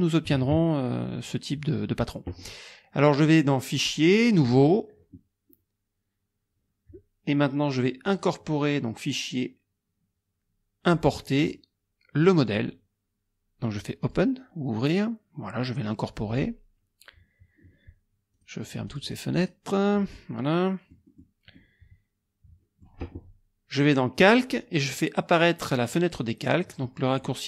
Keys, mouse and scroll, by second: 0.4 alt+Tab, 3.8 click, 4.3 click, 5.1 click, 8.1 click, 10.8 click, 12.5 click, 14.0 click, 16.3 click, 18.4 click, 18.7 click, 19.4 click, 20.2 click, 21.6 click, 24.2 click.